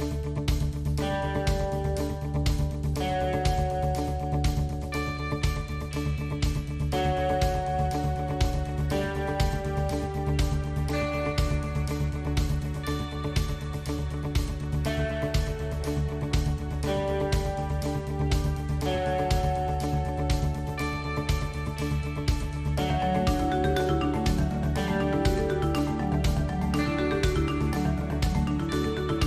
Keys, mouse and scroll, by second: 7.2 a, 8.6 s, 10.2 g, 13.2 a, 14.4 a, 14.5 a, 15.7 l, 16.9 s, 19.1 g, 21.8 Tab, 22.9 Tab, 25.5-27.7 middle drag, 27.3 shift+space, 28.4 middle click.